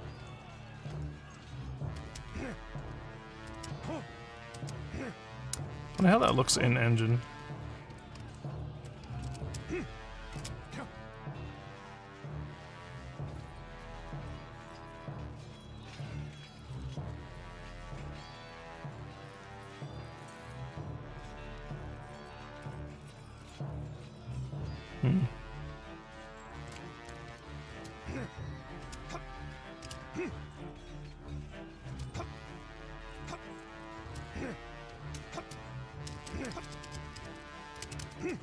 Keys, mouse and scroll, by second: 0.2 w, 0.9 a, 2.0 space, 2.3 d, 3.5-11.5 typing, 27.4-29.8 typing, 31.0-31.8 typing, 33.0 space, 34.0-36.5 typing, 37.9-38.4 typing.